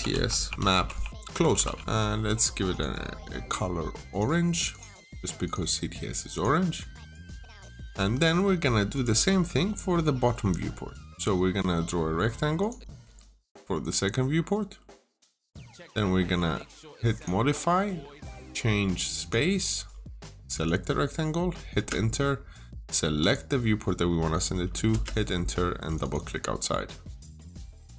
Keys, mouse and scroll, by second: 0.0-2.2 typing, 2.5 click, 5.5 double click, 6.2 click, 7.8 click, 7.8 Escape, 8.8 click, 9.4 scroll down 1, 9.5 middle click, 9.9-10.6 scroll up 1, 12.4 click, 14.2-14.5 scroll up 1, 15.3 click, 15.6 scroll down 1, 15.9 middle click, 17.0 click, 21.6 Return, 23.0 click, 24.7 Return, 25.7 click, 25.8 double click, 27.0 click, 27.7 scroll down 1.